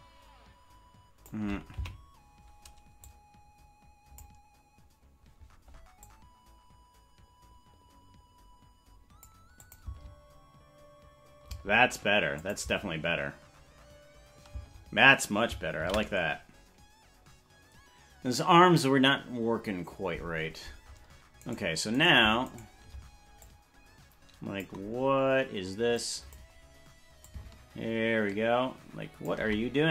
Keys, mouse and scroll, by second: 1.8 Left, 3.0-4.2 drag, 6.0-9.3 drag, 9.6 click, 9.8 space, 11.5 space, 12.4 click, 12.6 space, 14.5 space, 19.1 ctrl+s, 21.5-22.6 right drag, 23.4-24.7 drag, 26.0 click, 27.2-29.3 drag.